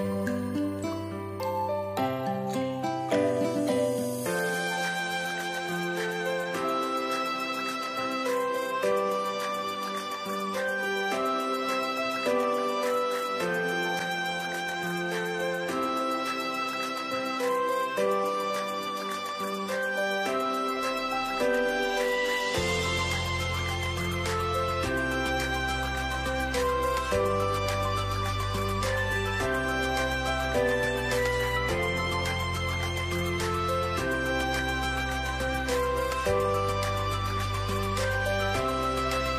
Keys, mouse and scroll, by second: 34.2 scroll up 1, 38.2 double click.